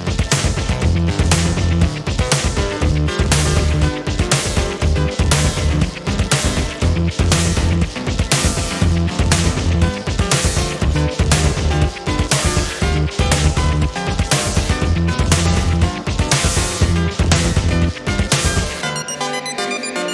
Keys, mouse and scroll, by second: 3.0 click, 3.7 space, 4.6 click, 5.5-6.3 ctrl+scroll up 2, 5.5 ctrl+click, 6.6-7.0 ctrl+scroll up 1, 9.4 ctrl+shift+g, 10.5 ctrl+shift+g, 12.7 ctrl+shift+click, 13.2 ctrl+shift+click, 15.0 ctrl+shift+g, 17.8 ctrl+d, 19.1-20.1 ctrl+drag.